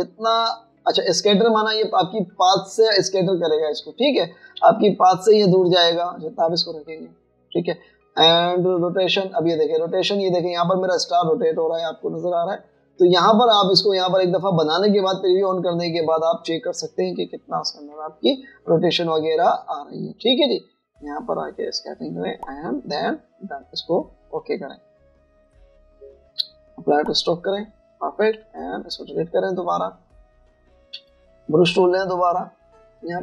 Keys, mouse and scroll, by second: 28.2 double click, 29.3 Delete, 32.0 b.